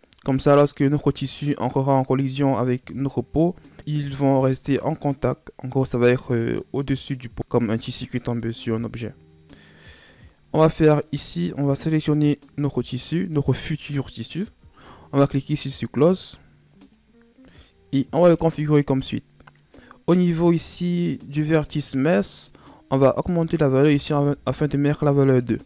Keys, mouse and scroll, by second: 1.0 right click, 2.8 right click, 11.3 right click, 12.1 middle click, 12.7-15.9 scroll up 5, 16.7-19.8 drag, 23.0-25.6 drag.